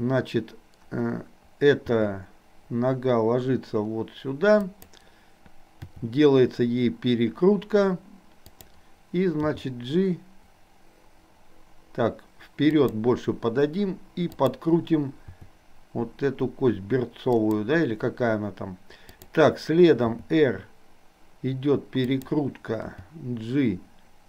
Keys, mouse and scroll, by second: 1.8 g, 6.0 r, 9.5 g, 14.4 click, 15.2 r, 20.2 r, 22.9 g.